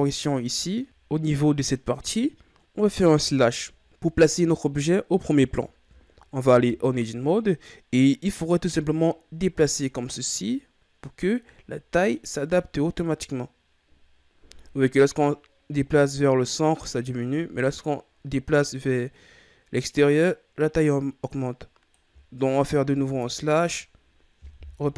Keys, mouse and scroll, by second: 0.2-0.8 middle drag, 0.8 Tab, 3.1 KP_Divide, 3.8 KP_1, 5.5-6.5 ctrl+scroll up 13, 6.5 Tab, 7.2-7.6 scroll up 1, 8.6-11.4 drag, 11.4-13.1 middle drag, 13.1-16.1 drag, 22.8 KP_Divide, 24.4 KP_1.